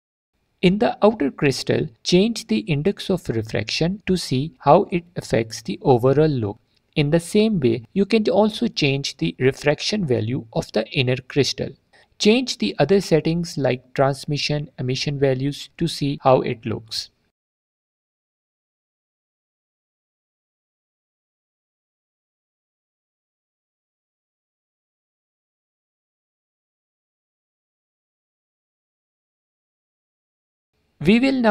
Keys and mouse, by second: 1.9-6.3 drag, 9.4 alt+shift+click, 14.1-15.3 drag, 15.3 shift+middle click, 16.0-17.8 middle drag, 17.8-18.8 drag, 19.1 click, 22.5-23.5 drag, 23.7 click, 25.5 click, 26.1 shift+click, 28.0 click, 29.2 drag, 29.4 alt+click.